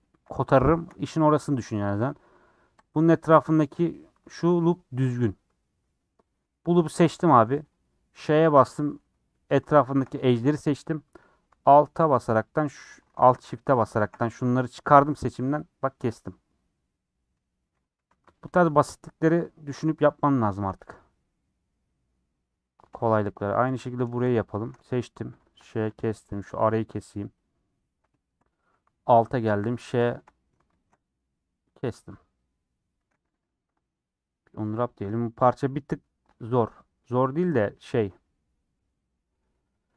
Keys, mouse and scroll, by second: 0.0-0.4 scroll up 3, 0.0 shift+middle click, 0.6-1.8 shift+middle drag, 1.8 3, 2.8 alt+click, 4.4-8.3 middle drag, 8.3 ;, 8.6-12.5 middle drag, 12.5 alt+click, 13.1 ctrl+z, 13.8 alt+shift+click, 18.5 alt+click, 20.0 middle click, 20.9 click, 21.6-22.3 scroll down 4, 21.8 middle click, 22.3 middle click, 22.9-23.3 scroll up 5, 22.9 shift+middle click, 23.3 middle click, 23.6 3, 23.8-24.5 scroll down 3, 24.5 alt+click, 25.3 ;, 26.4 Left, 27.4 Left, 27.7 middle click, 28.3 scroll up 2, 28.6 3, 29.9 ;, 31.5 scroll down 4, 31.8-33.0 middle drag, 33.0 a, 34.0 scroll down 2, 35.3 scroll down 1, 35.4 middle click, 35.8-36.2 scroll up 2, 36.2 middle click, 37.0 scroll up 2, 37.5-39.4 middle drag, 39.4 scroll up 2, 39.7 middle click.